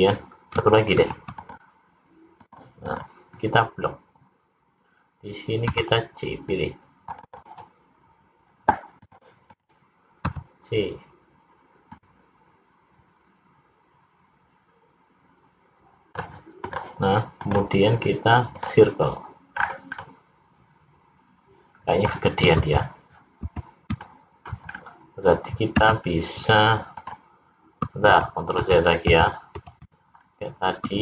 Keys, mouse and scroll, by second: 1.1 ctrl+r, 2.9 click, 5.8 c, 9.2 click, 9.6 click, 10.3 c, 17.5 right click, 19.6-20.1 scroll down 4, 20.1 middle click, 22.8 ctrl+z, 23.5 ctrl+z, 24.2 middle click, 24.8 scroll up 2, 25.8 `, 28.2 ctrl+z, 28.8 ctrl+z, 29.2 ctrl+z, 29.8 ctrl+z, 30.3-30.7 scroll up 1.